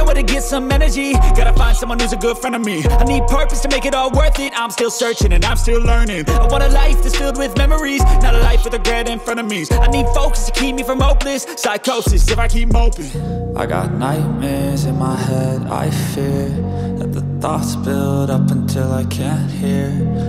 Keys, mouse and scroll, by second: 2.3 double click, 3.0 double click, 5.2 right click, 5.2 double click, 6.9 ctrl+alt+z, 7.4 ctrl+alt+z, 8.3 right click, 16.3 ctrl+alt+z, 17.9 double click, 18.3 right click.